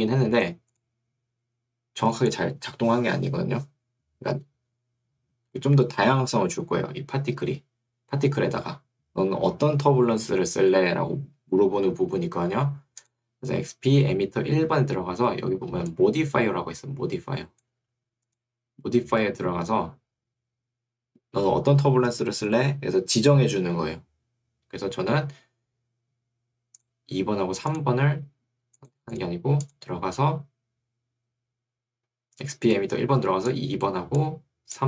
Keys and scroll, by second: 15.9 2, 17.9 Escape.